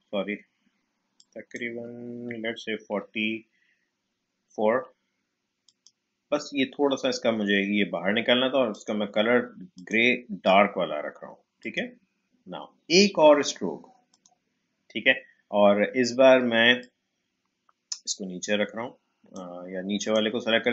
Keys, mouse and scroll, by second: 2.9 4, 5.6 click, 8.7 click, 14.1 click, 16.8-20.0 drag.